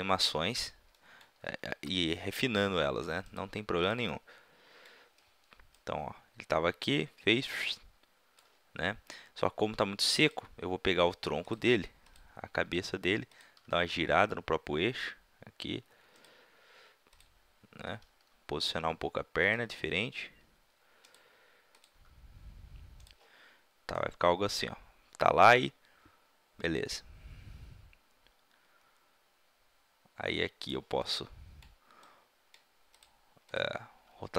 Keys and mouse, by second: 1.4 r, 2.4 middle click, 3.3-4.4 drag, 3.8-4.4 right drag, 4.7 click, 4.7-5.3 right drag, 5.3-7.6 middle drag, 10.3 click, 10.9 r, 12.7 r, 13.6-15.0 right drag, 13.6 r, 15.4 middle click, 16.2-16.8 right drag, 16.8 drag, 17.1 middle click, 17.8 click, 17.8 right click, 18.0 g, 19.5-21.8 drag, 19.8 r, 21.8-22.8 middle drag, 21.9 r, 22.8 click, 23.0 right click, 31.1-33.0 middle drag, 33.0-34.3 drag, 33.9 r.